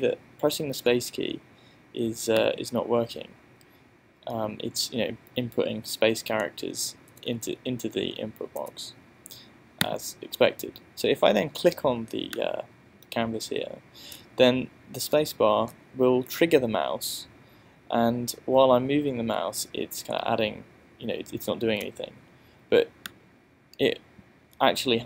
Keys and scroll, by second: 0.0 space, 6.6 BackSpace, 8.6 BackSpace, 14.2 space, 15.7 space.